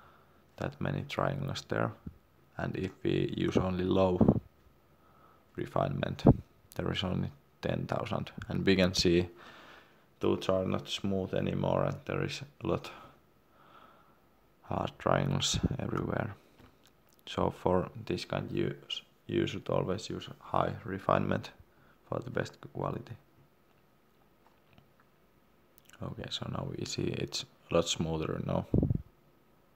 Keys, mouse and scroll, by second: 3.1 click, 10.7-11.1 scroll up 1, 11.3 shift+middle click, 17.7 click, 27.6 scroll down 1, 29.1 shift+middle click.